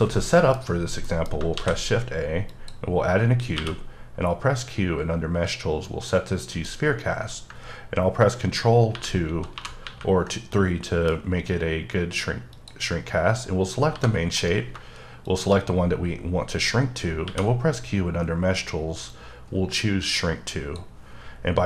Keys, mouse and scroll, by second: 1.1 middle click, 1.6 shift+a, 2.5 click, 3.1-3.6 scroll down 2, 3.6 q, 5.8 click, 7.1-8.9 scroll up 3, 8.9 ctrl+3, 9.4 ctrl+2, 9.5 ctrl+2, 10.3 ctrl+3, 10.5 middle click, 12.5 click, 13.5 scroll down 3, 13.7 scroll up 1, 13.9 g, 14.7 shift+right click, 15.3 shift+click, 17.2 q, 19.1 click.